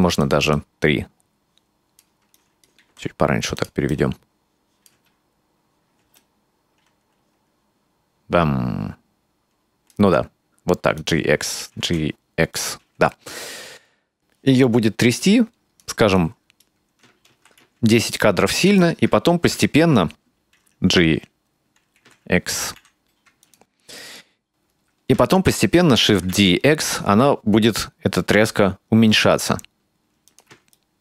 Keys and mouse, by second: 0.6-2.1 drag, 2.4-2.7 right drag, 2.8 g, 3.9-4.9 drag, 5.0 space, 6.1 space, 6.2-9.9 drag, 10.0 g, 11.8 g, 14.6-15.9 drag, 16.2-16.7 right drag, 17.4 shift+d, 22.0 g, 24.0 right drag, 26.0 shift+d, 30.1 ctrl+middle click, 30.4 ctrl+middle click.